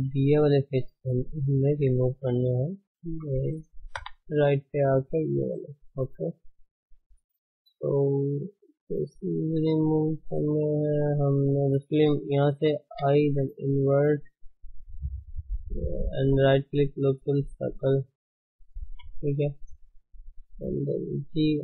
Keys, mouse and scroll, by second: 1.7 Tab, 2.9 shift+h, 4.0 KP_3, 4.3-4.7 scroll up 2, 4.7 Tab, 7.3 click, 8.4 shift+click, 8.7 shift+click, 9.1 shift+click, 9.3 shift+click, 9.7 shift+click, 10.0 shift+click, 10.3 shift+click, 10.6 shift+click, 11.2 shift+click, 11.4 shift+click, 13.0 i, 14.5-17.5 middle drag, 17.5 right click, 18.1 middle click, 19.0 KP_1, 21.1 g.